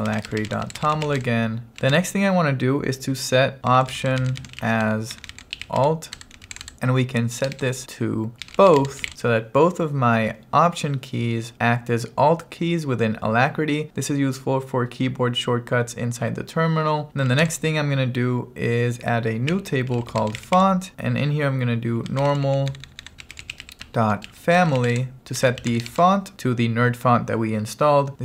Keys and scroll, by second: 0.0-1.7 typing, 2.0 Return, 3.5-9.0 typing, 17.3 o, 17.5 Return, 19.3-26.0 typing.